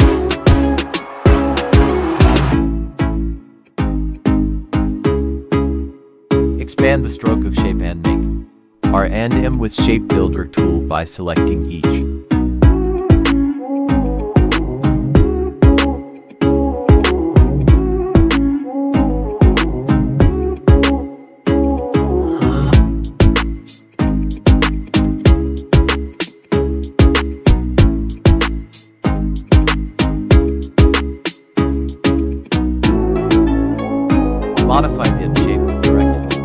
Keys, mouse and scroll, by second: 0.8 shift+click, 1.8 Escape, 4.7 click, 7.7 click, 7.8 ctrl+a, 9.3 click, 11.8 click, 17.4 shift+click, 21.8 click, 22.8 Escape, 23.8 click, 24.9 right click, 26.0 click, 28.1-32.0 shift+drag, 32.7 ctrl+a, 33.5 click.